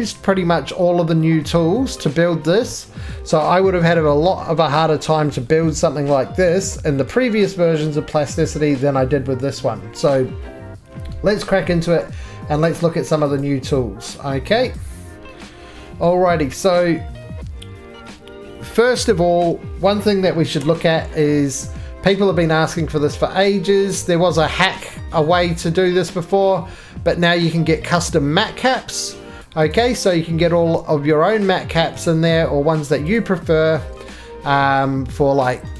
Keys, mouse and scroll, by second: 4.7-5.3 scroll down 1, 5.3-5.6 shift+scroll down 1, 5.6 shift+middle click, 7.0 middle click, 7.0-8.7 scroll, 8.7 middle click, 8.8-9.3 scroll, 10.3-11.0 scroll, 12.6 click, 13.4 click, 14.8 click, 16.0 middle click, 18.9 click, 20.6 click, 21.6 click, 23.4 click, 23.6 right click, 24.3-24.7 scroll, 25.3 right click, 29.4 click, 29.7 click, 30.4 middle click, 32.0 right click, 33.1 click, 34.8 middle click, 35.0-35.7 scroll down 1, 35.7 right click.